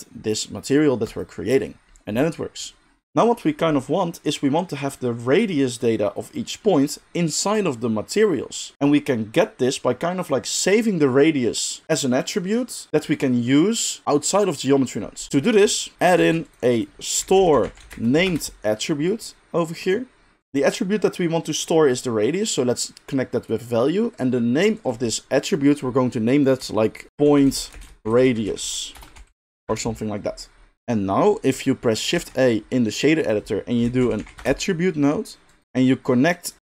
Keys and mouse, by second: 3.0-4.9 middle drag, 4.9-15.9 drag, 15.9-20.4 shift+middle drag, 15.9 g, 16.2 shift+a, 20.4 drag, 20.6-21.6 middle drag, 21.6-35.6 drag, 27.1 shift+BackSpace, 32.2 shift+a, 34.2 t, 35.6-36.5 middle drag, 36.5-36.6 drag.